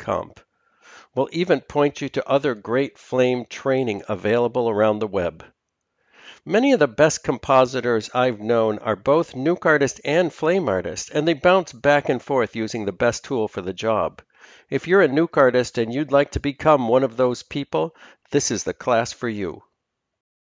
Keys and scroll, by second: 0.0 F4, 0.4 Escape, 0.4 F2, 1.2 Down, 1.2 typing.